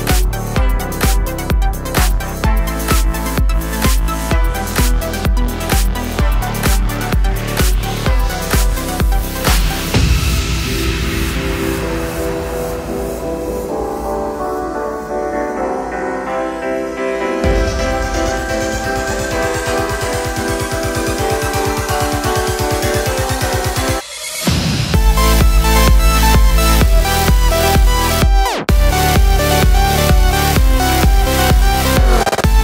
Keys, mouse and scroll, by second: 0.7 click, 1.1 click, 1.7 shift+middle click, 1.9 click, 2.2 click, 2.8-4.4 middle drag, 3.0 Tab, 4.4 click, 4.8-5.7 drag, 6.0 drag, 7.3 click, 7.6 Tab, 8.1 click, 9.4-10.4 middle drag, 9.9 Tab, 10.4 click, 10.8 l, 11.8 click, 12.1 click, 12.2 middle click, 12.6 Tab, 12.7 click, 13.1 click, 14.0-15.0 drag, 14.8 Tab, 15.4 l, 16.0 3, 16.1 click, 16.9 l, 19.0 click, 19.6 click, 20.1 Tab, 20.4 click, 20.6 shift+click, 21.5-22.8 drag, 23.2 click, 24.2-25.2 drag, 25.5 click, 25.7 click, 26.3 shift+middle click, 26.6 click, 26.9 click, 27.2 click, 27.4 click, 28.7 click, 29.5 Tab, 30.3 click, 31.2-32.4 drag, 31.9 Return.